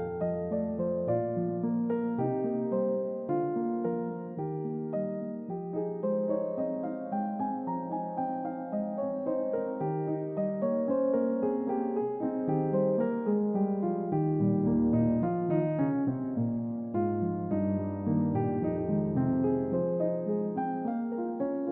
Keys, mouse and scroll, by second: 1.6-2.8 drag, 8.5 middle click, 8.5 scroll down 2, 12.3 middle click, 12.3-13.0 scroll down 3, 14.0-14.8 scroll up 3, 16.2 click, 17.1 click, 18.2 click, 18.9 click, 20.9 middle click, 20.9 scroll down 2.